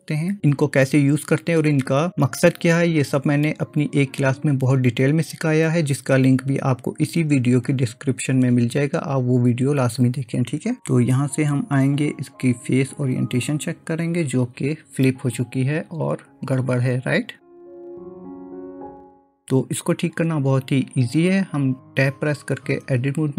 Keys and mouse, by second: 12.1-13.8 drag, 18.0-18.9 middle drag, 22.9 Tab.